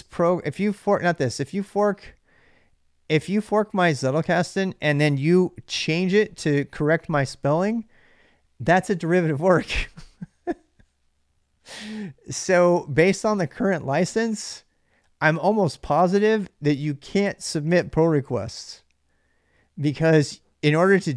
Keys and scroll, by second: 4.6-5.7 typing, 6.0 Return.